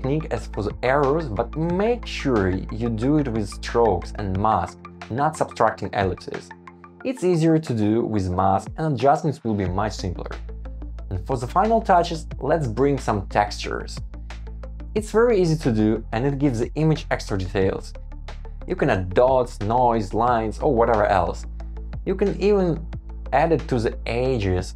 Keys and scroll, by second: 0.0 alt+super+v, 0.6 alt+super+c, 1.2 alt+super+v, 1.6 Escape, 4.1 shift+Down, 5.4 Escape, 10.0 Return, 10.3 Escape, 12.1 super+v, 12.7 super+g, 13.1 Return, 14.3 Escape, 14.6 Right, 14.8 super+c, 15.3 shift+Up, 16.0 super+z, 16.3 super+c, 16.5 Escape, 16.7 shift+Up, 17.2 shift+Down, 17.4 Return, 17.6 shift+Up, 17.7 Return, 18.4 super+z, 20.8 Escape, 21.2 Escape, 21.9 Escape, 22.2 super+c, 23.2 super+z.